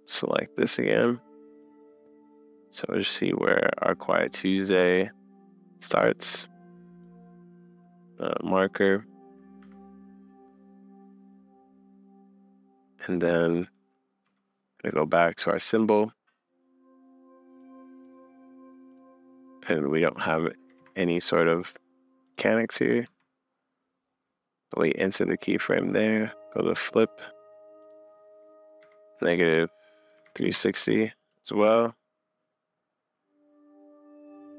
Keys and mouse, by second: 1.6-2.1 middle drag, 2.3 middle click, 4.3-4.9 middle drag, 5.0-6.1 drag, 7.0-11.2 middle drag, 8.2 m, 13.7 Up, 14.2 Down, 15.3 click, 17.7 click, 20.3 click, 23.0 Up, 24.8 click, 25.1 click, 26.8-27.8 middle drag, 30.5 middle click.